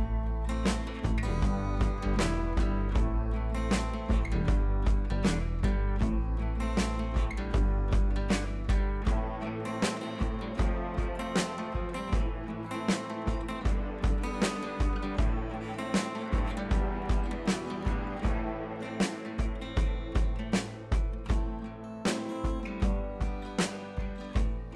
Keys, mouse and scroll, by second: 0.1 click, 1.3 click, 2.3-3.0 drag, 4.1-4.6 alt+drag, 5.3 ctrl+z, 6.1-7.9 drag, 12.9 ctrl+[, 14.3-14.9 shift+drag, 15.6 ctrl+z, 16.2-16.7 shift+drag.